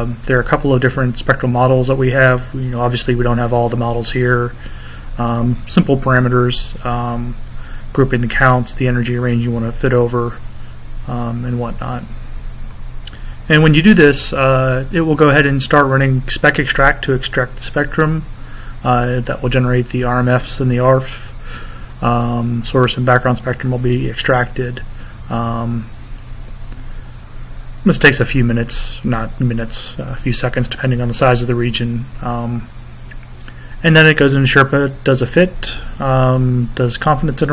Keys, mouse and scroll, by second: 0.3 click, 2.9 click, 8.6 click, 12.0 click, 13.5 click, 14.6 click, 34.3 click.